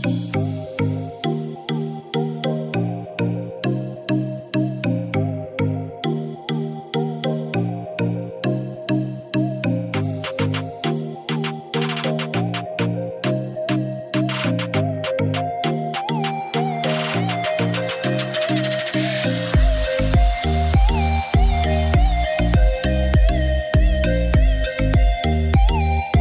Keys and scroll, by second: 5.5-6.3 typing, 21.7-22.6 typing.